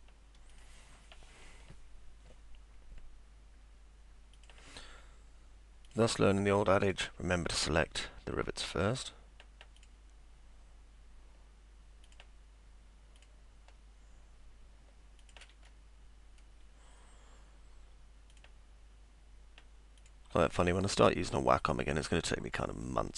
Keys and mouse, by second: 0.5 click, 4.4 click, 5.9 click, 6.9 click, 7.7 click, 9.0 click, 9.8 click, 12.1 click, 13.2 click, 15.2 click, 16.0 middle click, 18.3 click, 20.0 click, 21.6 click.